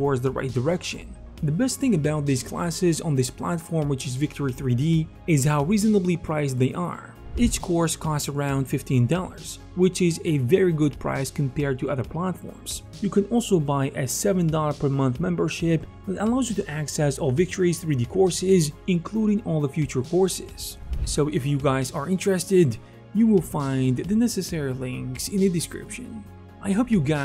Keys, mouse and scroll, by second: 0.2 ctrl+alt+KP_1, 2.4-3.8 ctrl+alt+shift+middle drag, 3.3 x, 3.8 ctrl+click, 4.0 ctrl+alt+z, 4.2 middle click, 4.2-7.2 ctrl+alt+drag, 4.4 f, 4.8 f, 5.3 ctrl+z, 6.8 f, 21.4-27.2 alt+shift+drag, 21.6 ctrl+z, 21.8 shift+f.